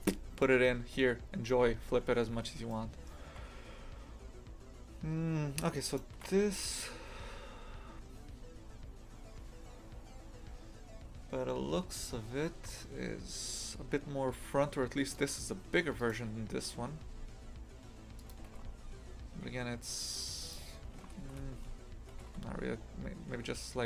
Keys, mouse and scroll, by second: 5.9 shift+right click, 15.1-17.0 right drag, 17.0 s, 21.0 ctrl+z, 21.2 ctrl+z, 22.2 g.